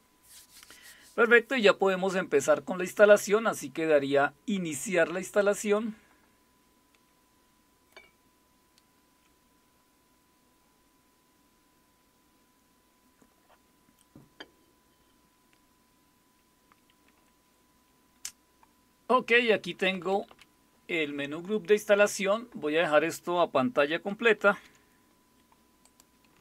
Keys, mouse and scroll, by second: 5.4 click, 19.3 Down, 19.5 Down, 19.6 Down, 19.9 Up, 20.1 Up, 20.3 Up, 24.5 super+w, 25.8-26.4 drag.